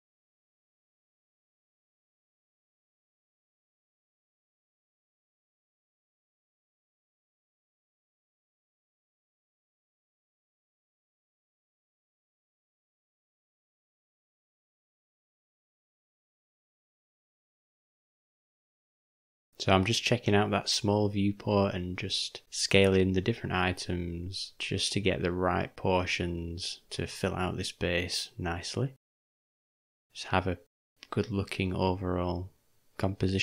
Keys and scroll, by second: 2.1 shift+m, 8.4 o, 11.8 s, 20.1 u, 22.3 s, 27.5 g.